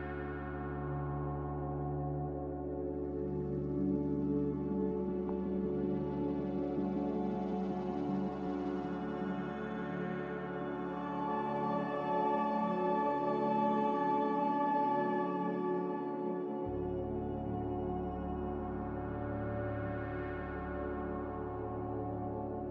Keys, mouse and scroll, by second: 4.1 ctrl+b, 5.8 m, 19.2 a.